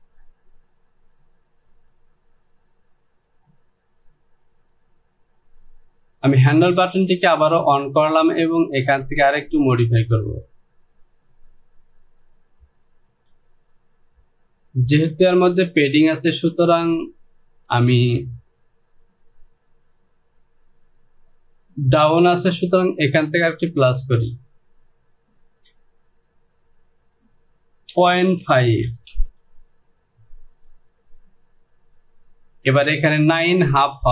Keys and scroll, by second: 28.0 KP_Decimal, 28.5 KP_5, 28.7 Down, 29.0 KP_0, 29.2 Down.